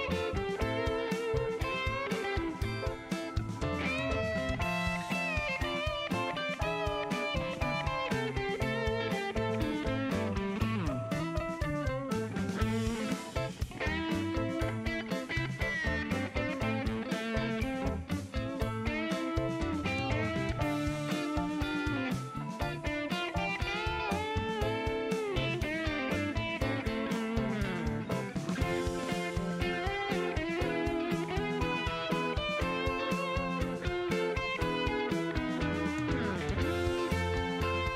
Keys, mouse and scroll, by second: 0.0 click, 1.7 click, 2.6 click, 4.0 click, 7.2 click, 8.8 click, 10.5 click, 12.1-13.0 typing, 14.2-15.5 drag, 16.1 middle click, 17.9 click, 19.2 click, 20.5 KP_2, 20.5 KP_0, 20.7 KP_Enter, 22.2 click, 23.2 click, 25.8 click, 27.9-28.9 middle drag, 29.6-31.8 drag, 32.6 click, 34.9 scroll down 1, 36.2 click, 36.8 click.